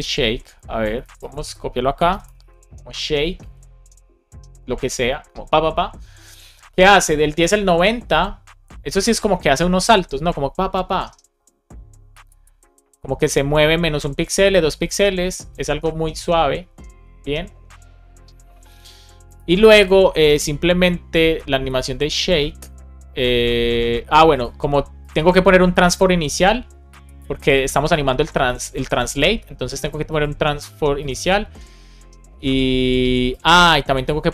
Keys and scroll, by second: 1.0 super+c, 2.2 Return, 2.3 super+v, 3.3 super+s.